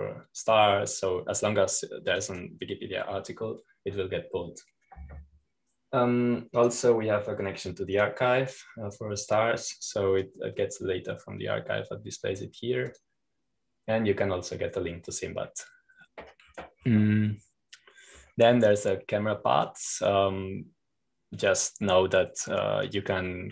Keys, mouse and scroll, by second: 0.0-1.4 drag, 4.1 click, 8.5 click, 9.9-12.0 drag, 14.9-16.9 drag, 18.3-19.3 scroll down 2, 20.1-21.5 scroll up 2, 21.5-23.5 drag.